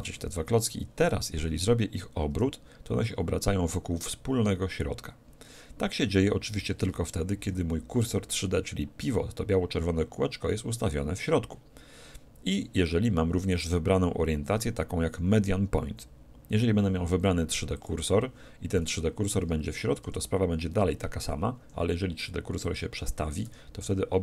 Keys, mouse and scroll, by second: 2.3 r, 13.5-15.5 drag, 20.0 r, 22.7-24.2 drag, 23.5 r.